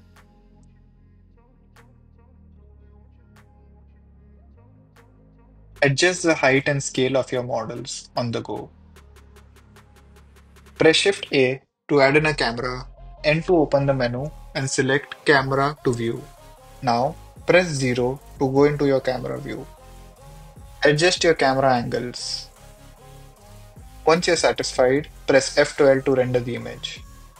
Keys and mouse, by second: 0.1 middle click, 3.0 middle click, 6.7 s, 7.1 z, 11.8 r, 12.1 z, 12.9 n, 15.6 click, 16.1 n, 17.5 KP_0, 22.6 middle click.